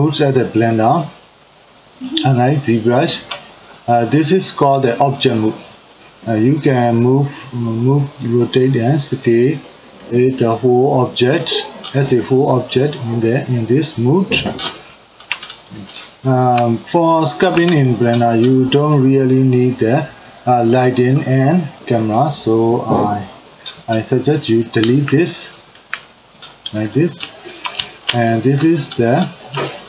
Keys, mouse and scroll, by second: 4.9-7.9 drag, 8.3-12.7 drag, 15.9-20.3 ctrl+middle drag, 20.4 click, 24.9 Delete, 25.3 click, 25.8 Delete, 26.9-28.8 middle drag, 28.8 drag, 29.2-29.8 middle drag.